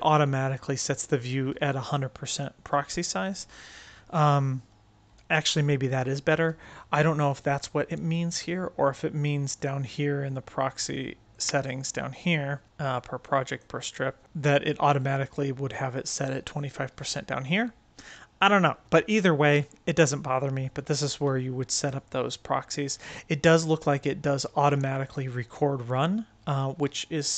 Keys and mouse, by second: 11.2-11.7 drag, 12.6 click, 14.2 click.